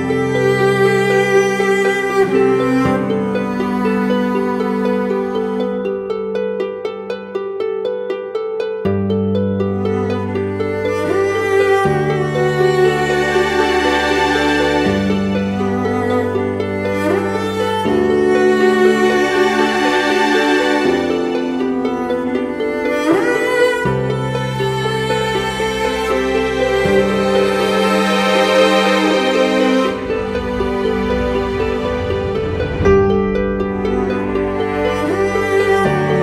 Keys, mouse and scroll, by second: 27.0 typing.